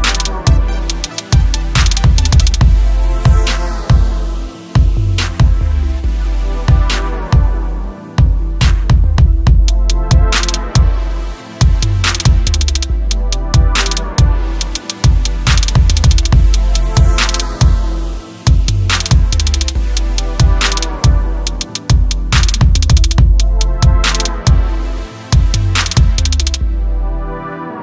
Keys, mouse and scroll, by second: 0.4 Left, 5.9 Left, 8.5-9.0 scroll up 1, 10.9 click, 15.0 click, 16.5 click, 18.2-19.4 typing, 19.9 scroll down 1, 20.7 scroll up 1, 22.2 scroll down 1, 22.4 click, 24.7 space.